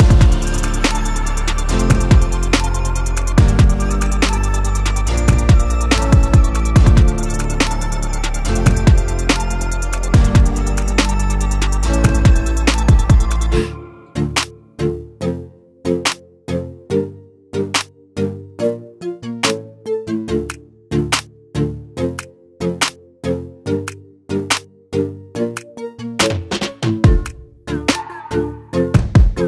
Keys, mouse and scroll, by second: 1.7-26.0 drag.